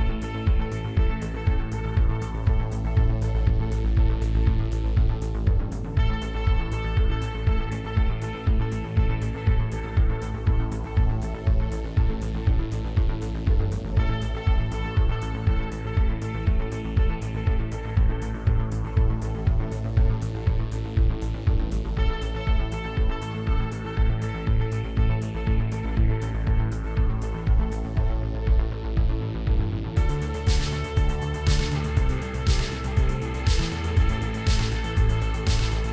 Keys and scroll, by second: 1.9 4, 2.2 Return, 9.6 0, 9.9 Return, 27.4 Tab, 30.6 2, 31.9 ctrl+b, 34.0 s.